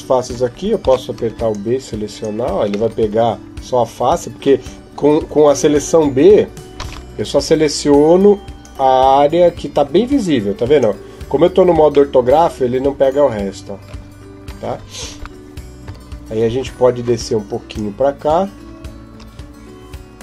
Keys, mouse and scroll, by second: 0.6 a, 1.0 b, 2.7 middle click, 5.8 KP_7, 6.6 a, 7.5 b, 11.9 middle click, 13.7-15.1 scroll up 1, 15.6 KP_1, 17.5 click.